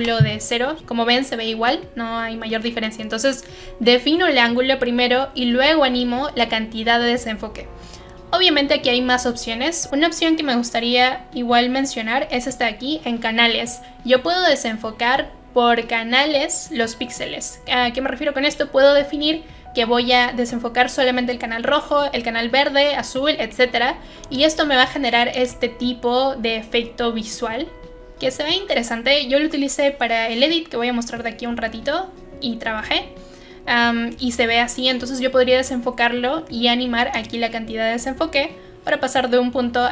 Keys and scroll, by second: 0.0-0.3 typing, 2.3-3.1 typing.